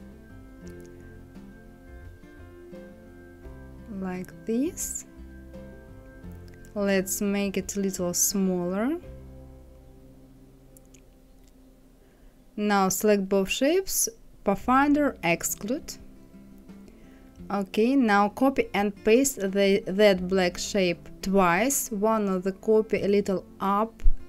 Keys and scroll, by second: 0.3 Left, 2.0 Left, 2.8 Right, 3.0 Left, 17.4 ctrl+c, 17.9 ctrl+f, 18.4 ctrl+c, 19.0 ctrl+f, 20.0 Up, 21.2 Right, 22.5 Up.